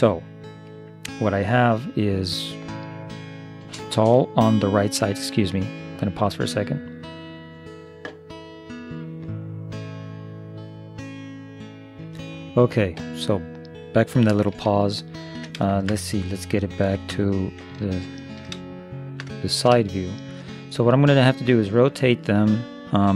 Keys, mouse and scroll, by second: 1.5 middle click, 14.8 middle click, 16.9 ctrl+KP_3, 18.0-20.2 middle drag.